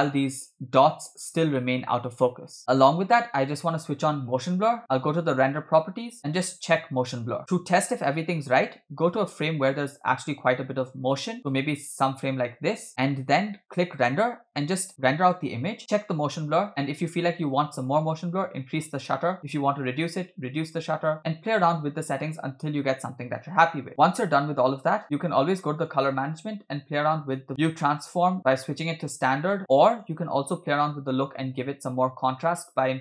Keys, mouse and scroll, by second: 0.3 space, 2.6 space, 4.8-5.2 scroll down 4, 5.3 click, 6.6 click, 8.8 click, 9.3-12.9 drag, 13.9-15.8 drag, 25.0-25.7 scroll down 6, 25.7-26.7 scroll down 2, 25.8 click, 26.7-27.5 scroll down 1, 28.4-29.6 drag, 29.9-31.3 drag.